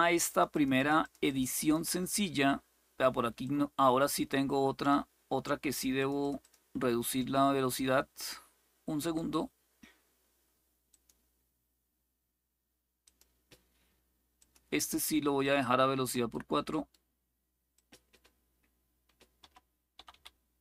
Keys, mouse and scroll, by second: 0.0 click, 1.0 click, 1.3 click, 3.1-4.6 drag, 5.7 click, 8.8 click, 10.6 click, 12.7 click, 14.1 click, 15.1 click, 17.4 click, 19.5-20.6 typing.